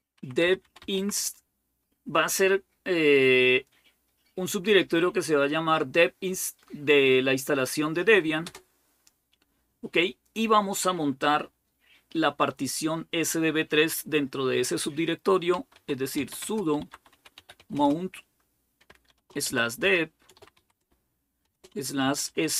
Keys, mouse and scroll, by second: 0.0-1.4 typing, 8.2 Return, 15.4-17.6 typing, 18.9-22.5 typing.